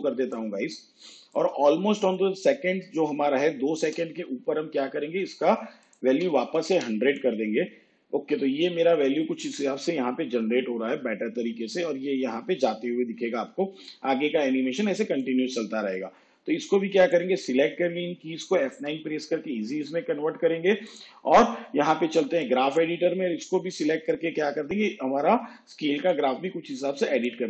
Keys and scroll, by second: 6.3 1, 18.9 F9.